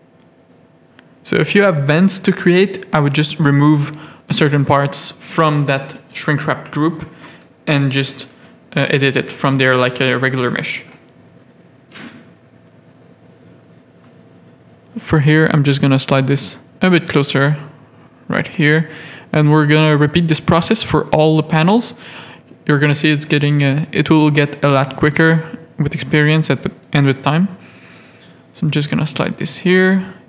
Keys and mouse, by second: 0.6 shift+middle click, 1.2 middle click, 1.6 middle click, 2.9 g, 5.2 shift+middle click, 6.1 click, 7.1 ctrl+click, 7.5 g, 9.0 Tab, 9.7 middle click, 10.1 z, 11.7 middle click, 12.1 Tab, 12.4 middle click, 12.7 z, 13.4 middle click, 14.6 ctrl+click, 14.9 g, 16.4 Tab, 16.6 middle click, 17.0 z, 18.0 middle click, 19.3 click, 20.0 alt+a, 21.4 alt+a, 22.0 KP_3, 23.6 shift+middle click, 25.2 click, 25.8 click, 26.5 Tab, 26.9 z, 27.9 g, 29.4 ctrl+r.